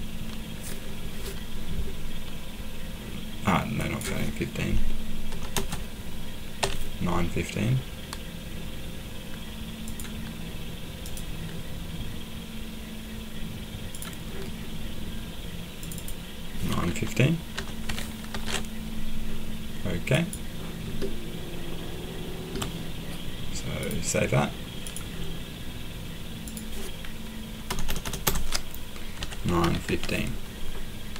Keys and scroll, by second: 5.3 BackSpace, 5.5 BackSpace, 6.6 typing, 17.3-18.8 typing, 27.7-30.4 typing.